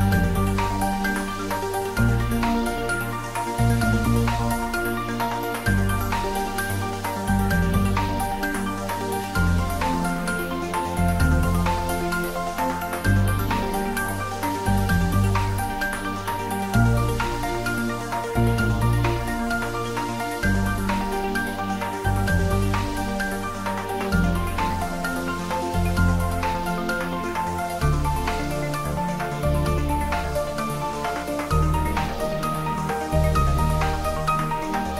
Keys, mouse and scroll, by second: 4.0 shift+click, 5.4 shift+g, 6.5 shift+click, 6.7 shift+Tab, 7.5 ctrl+r, 8.2 click, 10.2 click, 11.0 ctrl+r, 11.5 click, 13.2 click, 13.6 middle click, 14.6 click, 16.3 3, 17.4 click, 17.7-20.3 middle drag, 20.3 shift+z, 21.1 shift+click, 22.0 middle click, 23.2 shift+click, 23.9 ctrl+z, 24.4 shift+click, 24.8 middle click, 26.0 shift+z, 26.4-27.9 middle drag, 27.9 click, 28.4 shift+middle click, 29.5 alt+e, 30.5 click, 32.8 click, 33.1 ctrl+z, 34.8-34.9 middle drag.